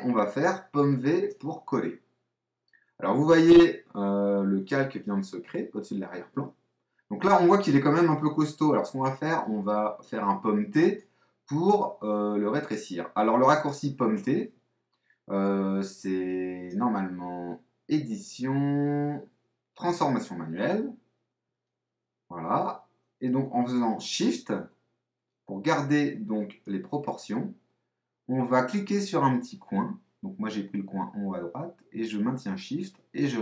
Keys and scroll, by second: 0.7 super+v, 10.4 super+t, 14.1 Escape.